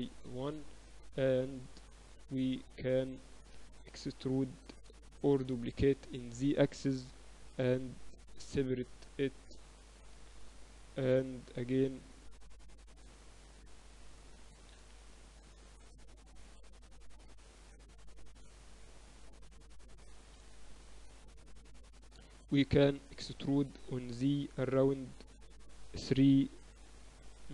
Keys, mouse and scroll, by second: 3.2-4.9 middle drag, 4.9 KP_1, 6.0 shift+d, 8.0 p, 8.8 Tab, 9.3 click, 9.5-12.0 right drag, 9.9 Tab, 10.4 Tab, 11.2 ctrl+alt+shift+c, 13.1-15.1 drag, 15.4 Tab, 15.6 a, 15.8 a, 16.4 Tab, 17.0 z, 18.1 KP_8, 18.4 KP_6, 18.7 Tab, 19.1 a, 19.3 a, 20.4-21.5 drag, 20.6-22.8 typing.